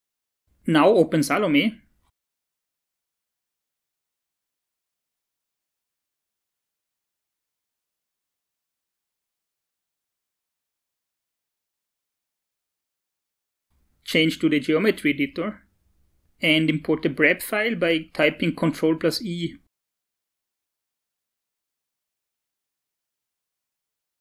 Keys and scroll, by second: 17.0 ctrl+i.